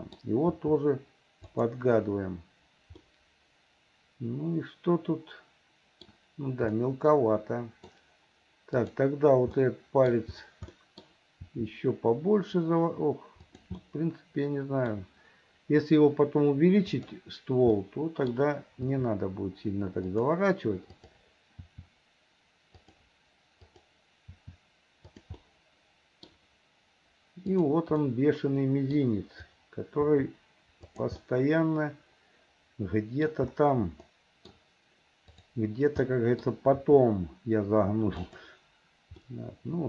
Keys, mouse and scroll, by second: 0.6 r, 3.1-6.1 middle drag, 6.8-7.9 middle drag, 8.8 click, 9.6 middle click, 10.7 middle click, 11.5 r, 13.8-14.9 middle drag, 14.9 scroll down 1, 16.9 click, 17.8 middle click, 18.9 r, 21.0 click, 21.7 r, 23.6 click, 24.3 r, 25.4 middle click, 27.6 click, 28.1 middle click, 30.1 r, 31.3-33.3 middle drag, 34.1 middle click, 35.3 click, 36.1 middle click, 36.7 r, 39.3-39.8 middle drag.